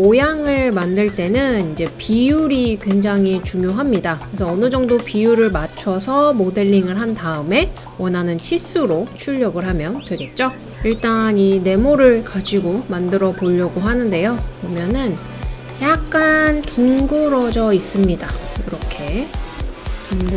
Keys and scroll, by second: 0.2-2.7 typing, 2.9 Return, 5.4-5.7 typing, 6.1 Return, 7.3 typing, 16.7 typing, 19.4-20.2 typing.